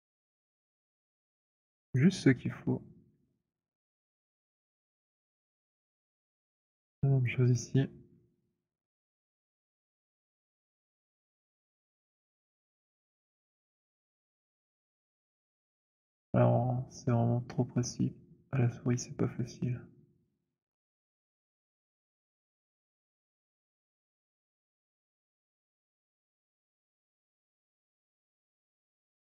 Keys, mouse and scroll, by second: 1.1 click, 2.0 alt+middle click, 3.7 alt+middle click, 5.2 alt+click, 5.4 middle click, 5.9 middle click, 7.4 click, 22.1 click, 24.1 alt+click, 25.7 click, 26.9-27.5 scroll, 27.9 alt+middle click, 28.4 alt+middle click, 28.4-28.9 scroll.